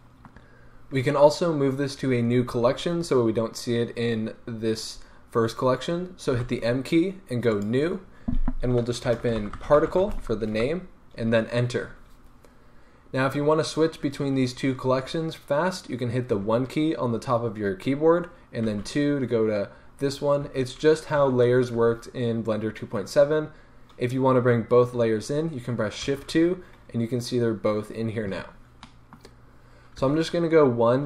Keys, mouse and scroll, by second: 10.5 Return, 16.3 1, 18.7 2, 20.5 1, 21.1 2, 21.7 1, 26.0 shift+2, 28.9 middle click, 29.9 1.